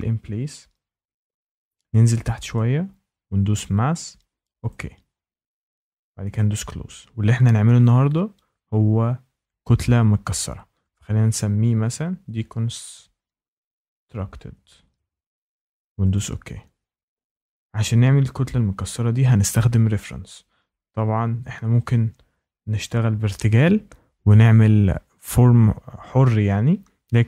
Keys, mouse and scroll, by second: 2.5 click, 3.6 click, 4.6 click, 6.3 click, 11.0-15.4 typing, 16.1 click.